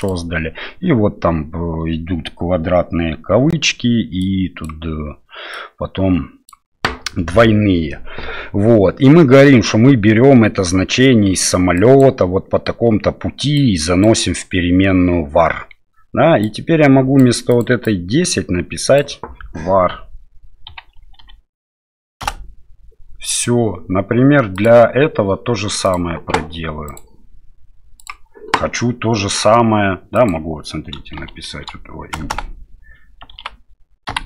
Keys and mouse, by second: 16.4-22.9 drag, 24.5 click, 25.8 click, 30.1-34.2 drag, 32.3 BackSpace.